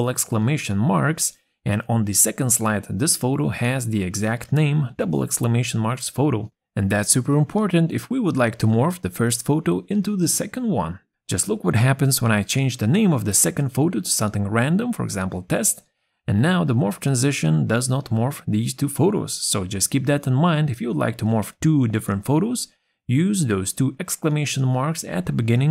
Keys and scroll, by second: 22.5 ctrl+a, 23.1 shift+1.